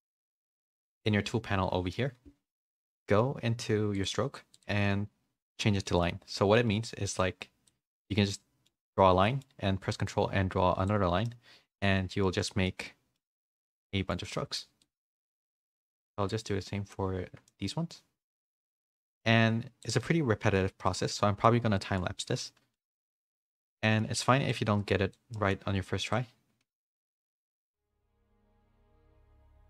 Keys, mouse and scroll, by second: 0.0 n, 4.0 click, 4.5-5.5 drag, 5.8 middle click, 6.5 middle click, 7.2 click, 8.1 middle click, 9.2 middle click, 10.1 ctrl+click, 11.2 middle click, 12.4 shift+middle click, 12.8-14.1 middle drag, 14.3 middle click, 14.8 middle click, 15.3-16.3 drag, 16.4 middle click, 17.4 middle click, 18.2 middle click, 19.0 ctrl+click, 20.0 middle click, 20.8-21.9 middle drag, 22.4 shift+middle click, 23.3 middle click, 23.8 middle click, 24.5 click, 25.3 middle click, 26.1 ctrl+click, 27.0 middle click, 27.7 middle click, 28.2 middle click, 28.7 middle click.